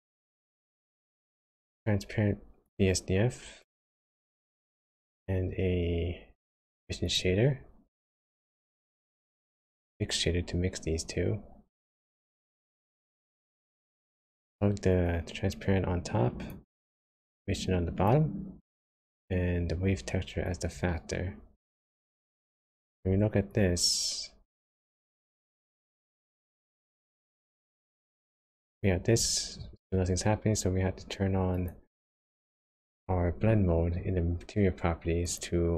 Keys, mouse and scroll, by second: 4.0 shift+a, 9.5 shift+a, 15.0 click, 17.3 click, 20.5 click, 22.9 ctrl+shift+click, 23.6 click, 25.2 click, 27.2 click, 28.3 click, 28.7 click, 31.7 click, 35.2 click.